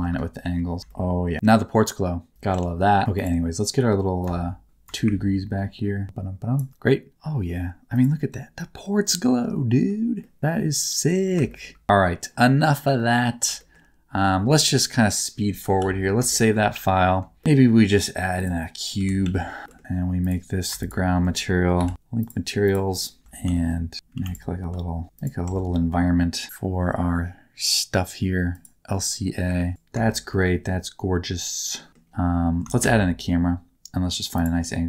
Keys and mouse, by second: 0.4 r, 0.8 g, 0.8 shift+middle click, 2.3 alt+z, 2.5 Tab, 4.2 shift+click, 4.8-6.5 shift+drag, 7.1 middle click, 8.8-9.8 middle drag, 10.2 middle click, 11.5 shift+middle click, 12.9 middle click, 13.5 shift+middle click, 15.8 ctrl+s, 16.2 shift+middle click, 17.3 middle click, 17.4 shift+a, 18.9 g, 19.2 z, 19.6 g, 20.1 click, 21.7 ctrl+l, 23.2 Tab, 23.2 z, 23.4 s, 23.5 middle click, 24.1 2, 25.4 Tab, 25.4 z, 25.7 middle click, 28.5 click, 29.6 middle click, 30.0 shift+middle click, 30.2-31.7 middle drag, 32.9 shift+a.